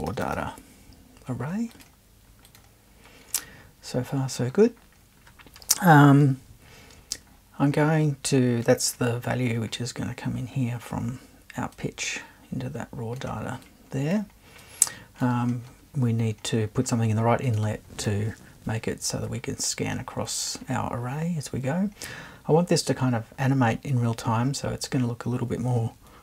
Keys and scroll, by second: 0.0-0.8 typing.